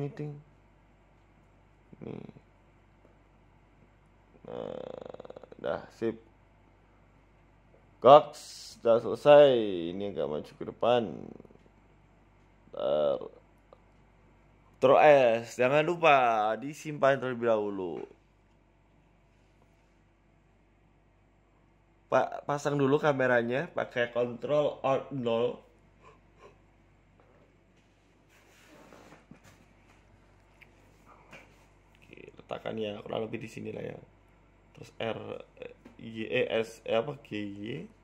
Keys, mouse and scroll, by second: 3.4 click, 4.7 shift+click, 6.8 g, 7.9 z, 8.5-9.3 scroll down 6, 8.7 middle click, 9.3 scroll up 4, 10.4 right click, 11.1 g, 12.9 KP_1, 13.3 z, 14.0 z, 14.9 scroll down 4, 15.1 shift+middle click, 18.0-18.4 scroll up 3, 18.3 shift+middle click, 19.0 shift+s, 22.1 right click, 22.6 g, 26.2 g, 27.9 g, 30.5 r, 36.0 f, 36.2 g.